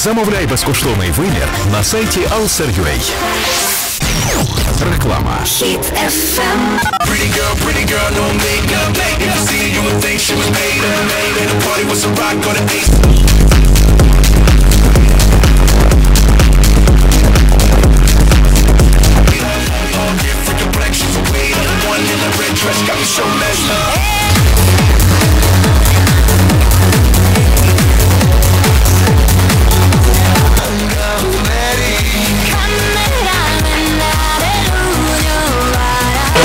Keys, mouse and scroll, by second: 19.4 Page_Down, 30.7 Page_Down.